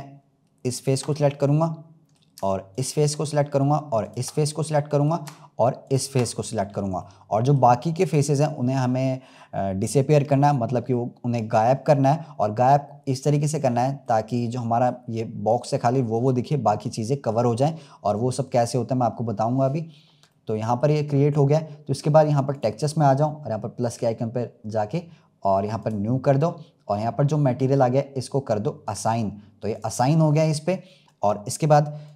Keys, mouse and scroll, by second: 0.0-0.6 scroll up 3, 0.6 shift+click, 1.1-2.7 middle drag, 2.7 shift+click, 3.9 shift+click, 4.5-5.7 middle drag, 5.7 shift+click, 6.9-22.5 middle drag, 22.5 click, 23.7-32.1 drag.